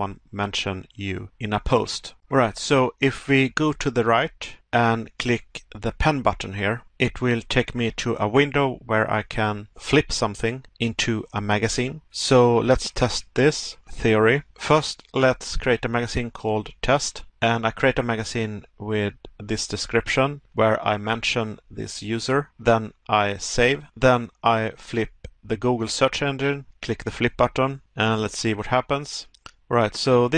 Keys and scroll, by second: 7.7 Pause, 10.3 Pause, 11.5 Pause, 13.0 Pause, 14.9 Pause, 18.5 Pause, 23.6 Pause, 29.5 Pause.